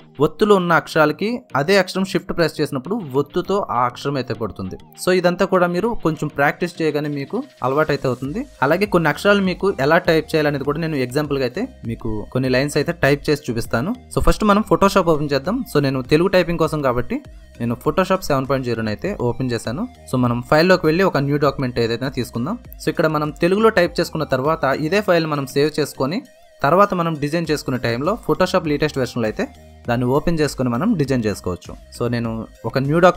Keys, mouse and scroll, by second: 15.8 click.